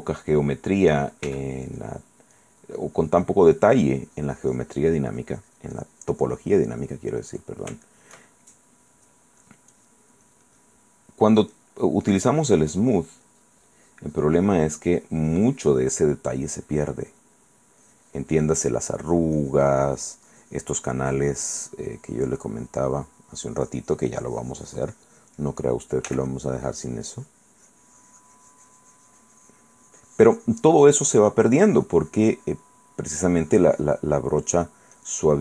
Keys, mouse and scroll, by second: 0.2 click, 1.5 f, 1.9 click, 2.5 click, 3.0-6.9 drag, 7.5 middle click, 8.0 shift+middle click, 9.6 click, 10.4 click, 11.3 click, 12.7 click, 13.2-16.2 drag, 16.2 click, 16.7-18.0 drag, 19.1 click, 26.3 f, 26.5 click, 26.8-33.0 drag, 33.1 middle click, 33.4-34.9 drag, 35.1-35.4 drag.